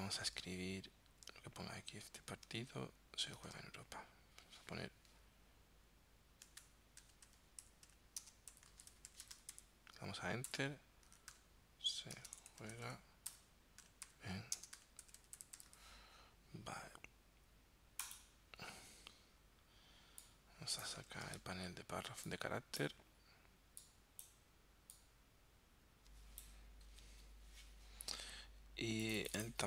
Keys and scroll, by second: 0.3 super+Tab, 3.4 super+Tab, 7.0-9.5 typing, 10.5 Return, 11.1-15.7 typing, 13.3 Return, 21.1 super+t.